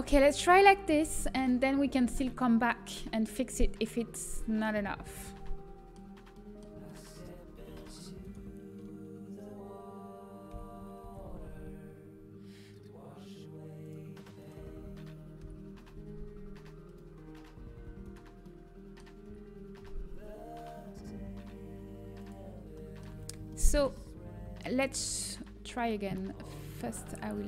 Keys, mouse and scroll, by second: 0.0 Tab, 0.0 a, 2.5-3.6 drag, 3.6 middle click, 6.3 middle click, 7.0-10.1 middle drag, 10.1 Tab, 10.4 g, 14.3-17.0 right drag, 17.0 g, 17.2-18.4 middle drag, 19.0-24.4 middle drag, 19.4 g, 24.4 a, 25.4 Tab.